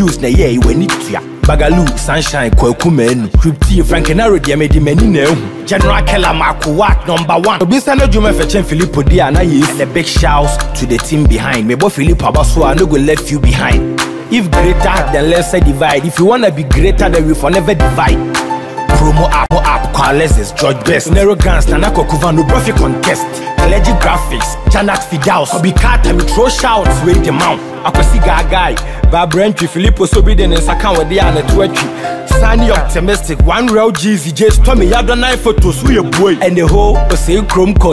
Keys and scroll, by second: 29.9 BackSpace.